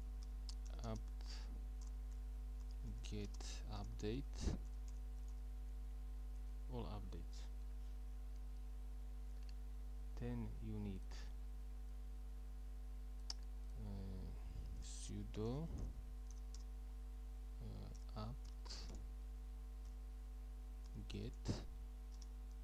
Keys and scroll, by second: 0.0-0.7 typing, 1.9-5.8 typing, 14.8-16.4 typing, 17.7-22.6 typing.